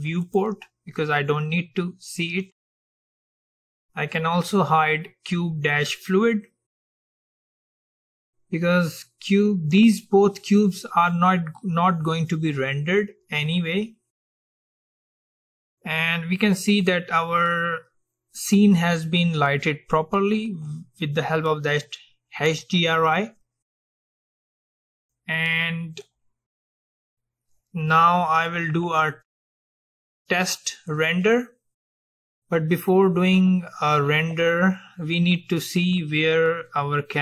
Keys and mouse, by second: 0.4-2.3 drag, 7.3-9.2 drag, 26.1-28.2 drag, 31.3-33.3 drag.